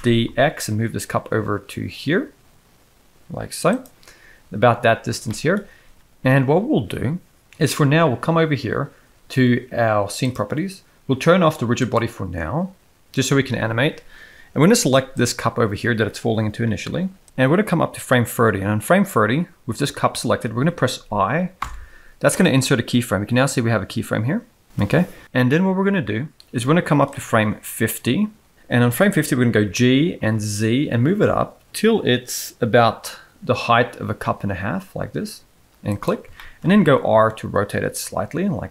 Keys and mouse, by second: 0.0 shift+d, 5.3 shift+middle drag, 15.2 click, 17.9-19.1 drag, 21.6 i, 27.1-28.5 drag, 29.5 g, 36.4 shift+middle click, 36.9 r.